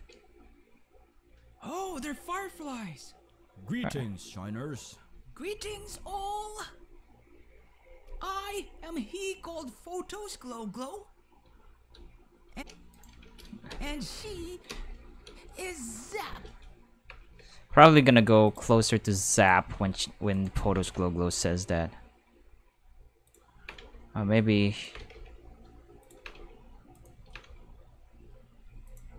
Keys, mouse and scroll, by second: 11.4-15.2 typing, 12.9 right click, 16.2-18.6 typing, 18.5 click, 19.4 right click, 19.7 g, 20.3 right click, 20.6 g, 23.2 click, 23.3-27.9 typing, 24.7 click, 26.0 click, 26.9 right click, 28.9 click.